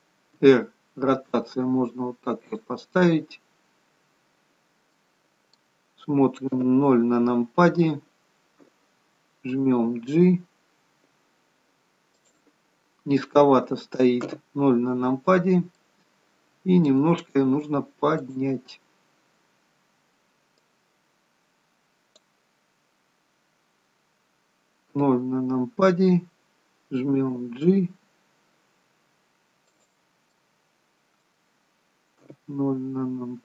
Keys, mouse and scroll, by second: 0.4 r, 3.7-5.0 scroll down 6, 5.0 middle click, 6.6 KP_0, 10.0 g, 12.8-14.3 scroll down 2, 14.3 scroll down 1, 14.3 KP_0, 15.4 scroll down 1, 15.7 middle click, 18.3 click, 20.6 click, 25.0 KP_0, 27.3 g, 30.4 middle click, 32.3 KP_0.